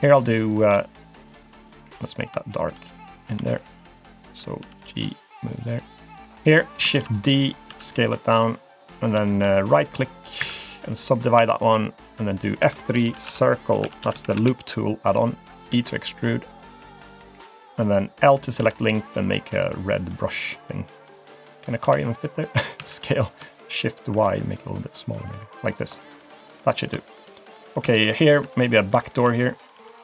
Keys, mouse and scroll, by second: 0.0 click, 0.5 click, 1.5 middle click, 2.2 click, 2.5 shift+click, 2.9 click, 3.5 shift+click, 3.9 shift+click, 4.6 g, 5.6 middle click, 6.5 click, 6.9 shift+d, 7.7 s, 9.9 right click, 10.7 right click, 11.5-12.6 scroll down 1, 12.6 F3, 15.8 e, 18.6 l, 19.5 g, 20.9 click, 21.2 click, 21.8 l, 22.8 s, 25.9-26.9 scroll down 3, 26.2 middle click, 27.1 shift+middle click, 27.4 middle click, 27.8 Tab, 28.1 middle click, 28.3 Tab, 28.6 click, 29.7 i.